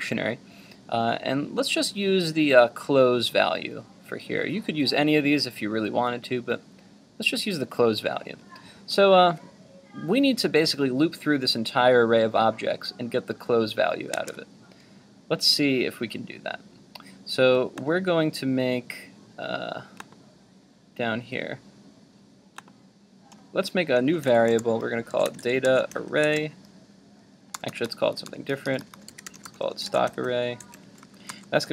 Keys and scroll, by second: 14.1 super+Tab.